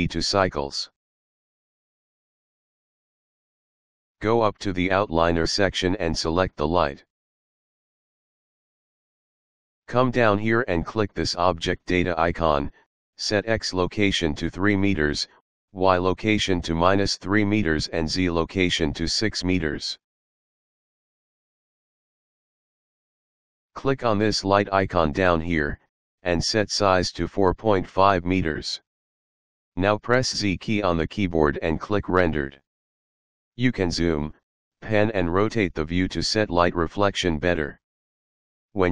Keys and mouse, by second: 0.1 click, 1.3 click, 7.7 click, 10.3 click, 14.0 click, 15.6 KP_3, 16.0 Return, 17.0 click, 18.7 KP_Subtract, 19.0 KP_3, 19.4 Return, 21.2 click, 21.9 KP_6, 22.2 Return, 24.1 click, 26.7 click, 27.5 KP_4, 27.8 KP_Decimal, 28.1 KP_5, 28.4 Return, 30.2 z, 31.7 click, 36.1 middle click.